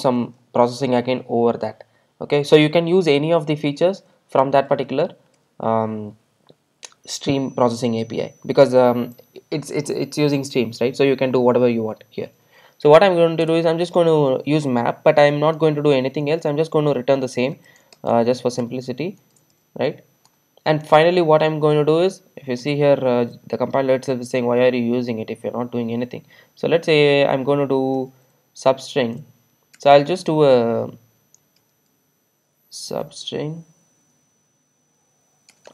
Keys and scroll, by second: 13.5 Return.